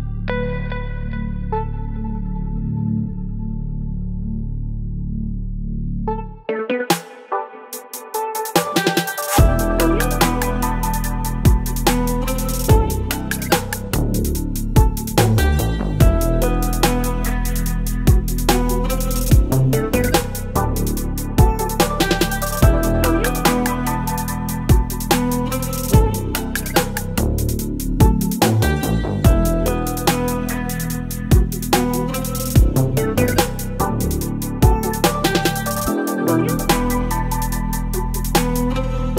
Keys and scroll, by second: 19.7 x, 20.1 ctrl+BackSpace, 20.8 ctrl+d, 21.0 space, 25.4 space, 31.3 ctrl+BackSpace, 34.9 ctrl+BackSpace, 35.4 space, 36.8 space.